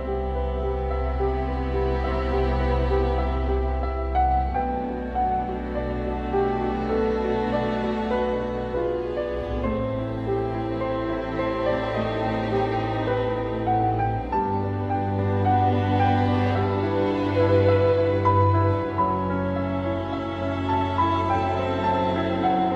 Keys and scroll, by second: 0.4 ctrl+z, 1.7 ctrl+z, 2.8 ctrl+z, 4.9 ctrl+z, 5.5 ctrl+z, 6.1 ctrl+z, 6.3 ctrl+z, 9.5 ctrl+z, 12.2 ctrl+z, 14.4 ctrl+z, 15.9 ctrl+z, 16.6 ctrl+z, 17.4 ctrl+z, 17.9 ctrl+z, 20.3 ctrl+z.